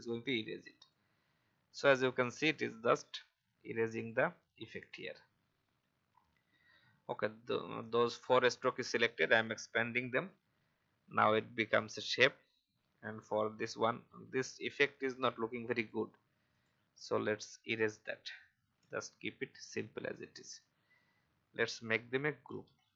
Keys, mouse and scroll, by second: 0.4 v, 0.8 click, 1.5 alt+scroll down 1, 2.4 click, 3.9 shift+click, 4.7 shift+click, 7.8 click, 13.4 alt+scroll up 1, 14.9 click, 17.4 Delete, 18.7-19.5 alt+scroll down 1, 19.5-21.9 drag.